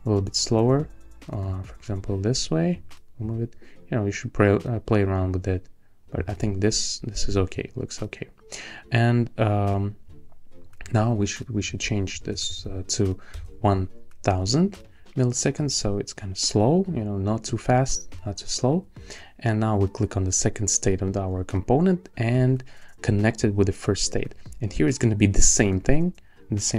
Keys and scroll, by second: 11.9-12.8 typing, 13.3 Return.